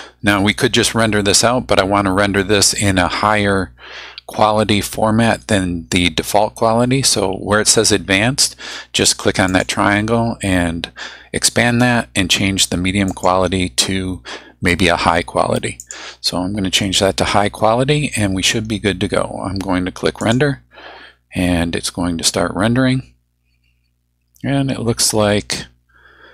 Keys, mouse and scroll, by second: 9.5 click, 13.1 click, 15.8 click, 20.2 click.